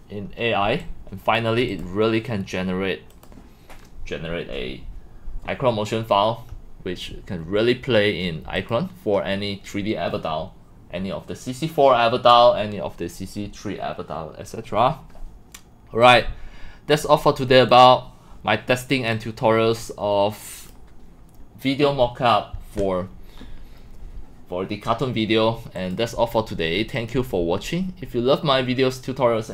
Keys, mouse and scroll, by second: 0.9 click, 1.7 click, 3.1 click, 8.6-12.3 drag, 13.5 click, 16.0 click, 17.7 click, 25.8-28.1 drag.